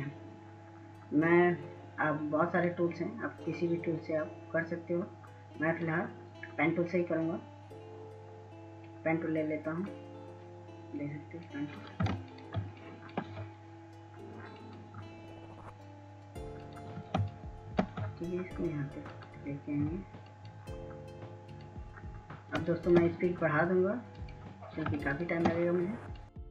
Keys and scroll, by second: 14.3 ctrl+space, 19.7 scroll, 26.4 ctrl+space.